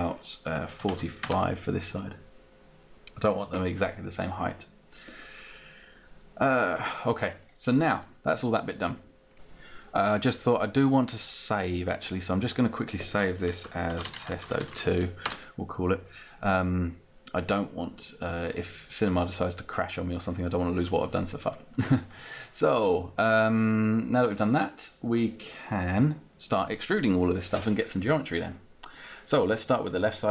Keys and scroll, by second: 0.6-1.5 typing, 14.8 Return.